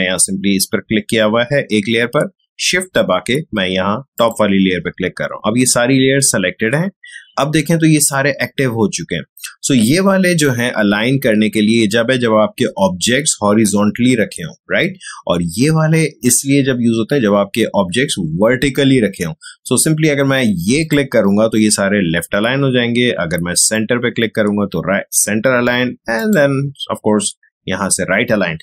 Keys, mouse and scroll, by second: 20.8 click, 23.6 click, 26.1 click.